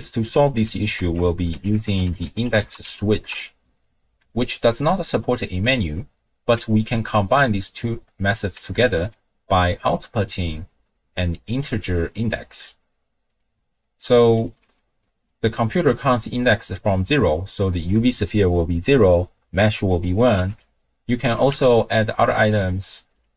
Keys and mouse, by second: 1.0 ctrl+a, 7.1-7.8 ctrl+drag, 8.3 click, 8.7 ctrl+x, 9.1-9.5 drag, 9.9-11.7 drag, 13.5-14.5 drag, 14.8-15.3 drag, 19.9 click, 21.3 click, 21.5 n, 22.7 click, 23.0 click.